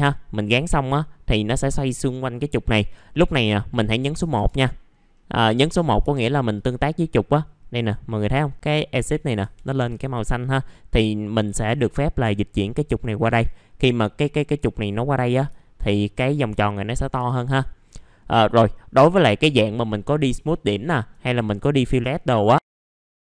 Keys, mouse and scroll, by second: 4.3 1, 4.9 scroll up 1, 6.0 F3, 6.5-7.5 drag, 9.4 F3, 9.6 middle click, 9.7-10.4 scroll down 1, 10.4-13.5 drag, 13.6-14.4 scroll down 1, 16.6 alt+middle click, 17.1 F4, 17.5-17.9 scroll up 1, 17.9 alt+middle click, 18.5-19.7 scroll up 1, 20.7 alt+middle click, 23.1 scroll down 1.